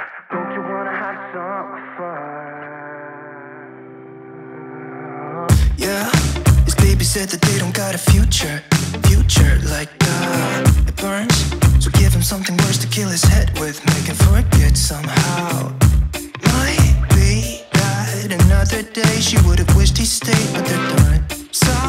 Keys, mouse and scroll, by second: 0.0-1.0 typing, 0.8 click, 1.4 scroll up 1, 2.2 click, 2.5-8.8 drag, 11.8-21.8 drag.